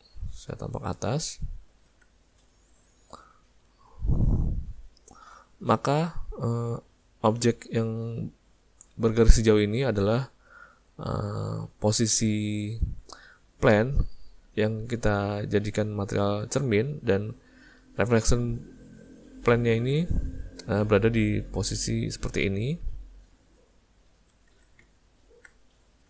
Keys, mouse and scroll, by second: 2.6 ctrl+middle click, 3.1 ctrl+middle click, 3.5 ctrl+middle click, 23.8 middle click, 25.2 middle click, 25.9 middle click.